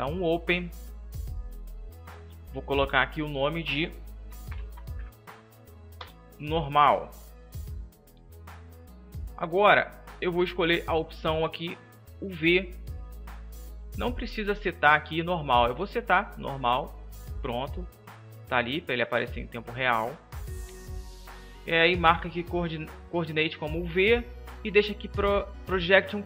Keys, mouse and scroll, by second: 11.8-16.4 drag.